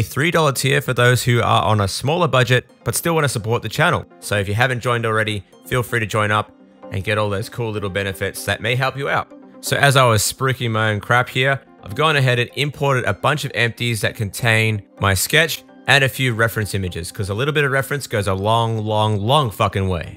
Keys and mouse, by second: 0.0-4.6 drag, 0.0-1.6 middle drag, 0.0-1.6 right drag, 4.6-10.0 right drag, 10.0-12.9 drag, 12.9-14.3 middle drag, 14.4 middle click, 15.4 KP_0, 15.6 KP_1, 16.6 shift+middle click, 19.5 s, 19.7 s.